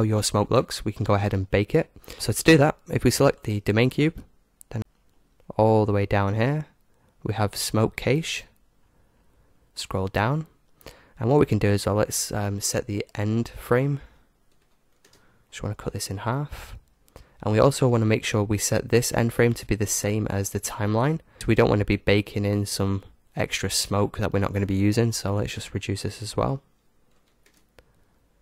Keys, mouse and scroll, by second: 3.3-4.7 right drag, 4.9-8.3 middle drag, 8.3-10.3 drag, 10.1-11.6 middle drag, 12.8-20.1 drag, 25.8-27.6 drag.